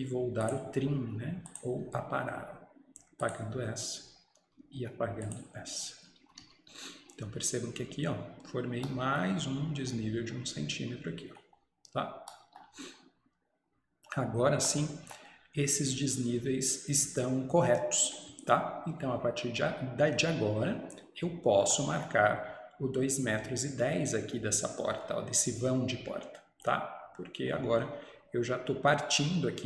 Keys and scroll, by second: 6.3 Escape, 6.5 Escape.